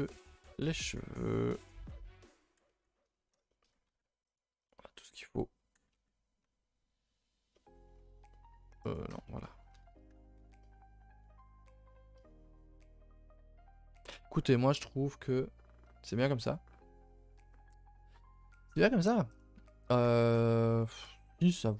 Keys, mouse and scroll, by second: 0.6 a, 0.8 a, 1.5 click, 2.9 scroll down 2, 3.0 a, 3.2 a, 3.4-4.6 shift+middle drag, 4.6 click, 7.5-7.8 middle drag, 7.8-8.6 scroll up 4, 8.8 click, 9.2-9.6 shift+middle drag, 9.6 scroll up 2, 9.7 a, 9.8 a, 10.0-10.4 middle drag, 10.4 ctrl+s, 10.6-13.6 middle drag, 21.1 KP_0.